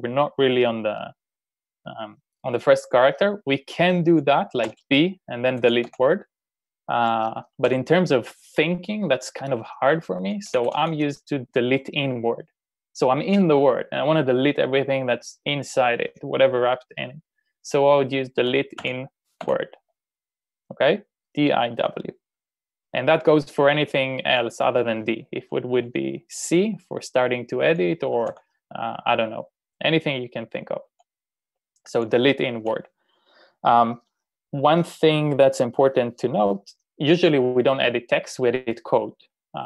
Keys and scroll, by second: 4.7-6.3 typing, 7.6 u, 10.6 typing, 18.2-19.4 typing, 28.2 u.